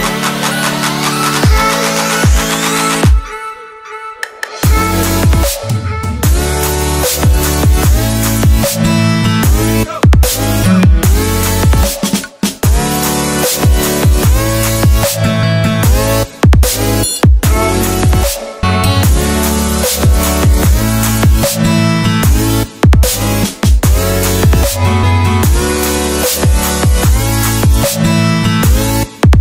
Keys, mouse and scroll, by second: 1.0 Return, 1.2 click, 2.0 KP_Add, 2.2 KP_9, 3.0 Return, 3.2 KP_Add, 3.3 KP_2, 3.5 BackSpace, 3.9 KP_1, 4.5 click, 5.7 BackSpace, 5.8 click, 7.8 ctrl+c, 8.2 ctrl+v, 8.4 click, 10.4 click, 10.9 Return, 11.1 alt+Tab, 11.7 click, 11.9 ctrl+c, 12.0 alt+Tab, 13.0 ctrl+v, 13.4 click, 14.3 scroll down 1, 15.7 ctrl+s, 16.7 click, 21.0 ctrl+s, 22.3 click, 28.3 ctrl+z.